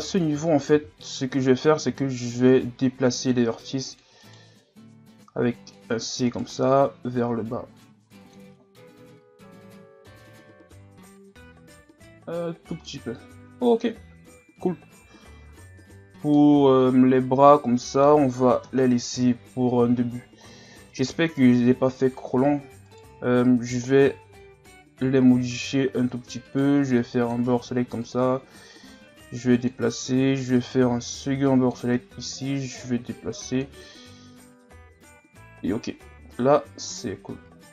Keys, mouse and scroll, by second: 0.8 z, 1.9 c, 5.2 c, 6.7-8.5 drag, 8.5 scroll up 3, 11.3-13.4 drag, 13.4 z, 15.0 Tab, 15.5 a, 15.8-16.3 scroll down 5, 16.3-18.6 middle drag, 18.6 KP_1, 19.4-20.0 scroll down 4, 20.5-21.7 scroll down 1, 21.7-22.7 scroll up 4, 22.9 right click, 24.1 Tab, 24.7 z, 25.1 scroll up 2, 26.5 right click, 26.7 b, 28.0-30.6 drag, 30.6 right click, 31.1 b, 32.5-33.8 drag, 33.8 Tab, 34.2 a, 35.0 z, 35.2-36.0 scroll down 7, 36.2-37.1 scroll up 3, 37.1-37.7 scroll down 2.